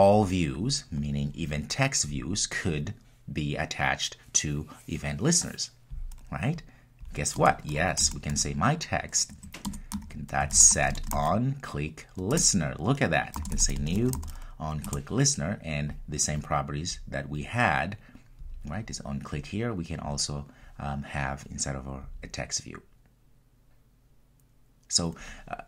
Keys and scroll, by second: 9.6 Return.